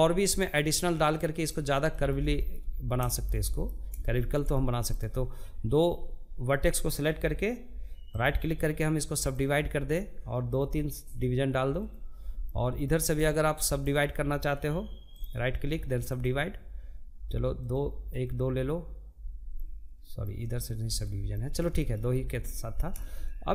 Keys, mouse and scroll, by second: 0.3-2.7 middle drag, 2.7 scroll up 1, 2.9-7.7 shift+middle drag, 7.7-9.6 right drag, 9.6-10.9 drag, 10.9-12.2 shift+middle drag, 12.2 click, 14.6-16.1 right drag, 16.1-18.0 drag, 18.0-19.3 middle drag, 19.3 ctrl+z, 19.7-23.5 middle drag.